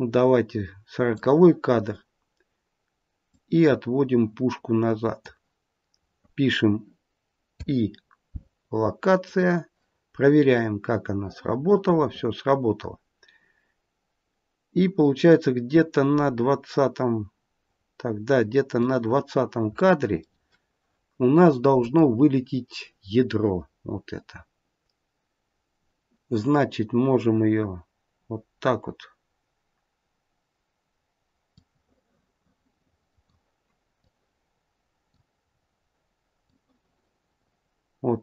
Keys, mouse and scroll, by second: 3.2 click, 10.5 click, 19.2-19.9 scroll down 1, 19.9 middle click, 21.7 click, 23.7-24.8 scroll down 1, 31.4 click, 33.9 click, 35.3-35.9 scroll down 3, 36.4 click.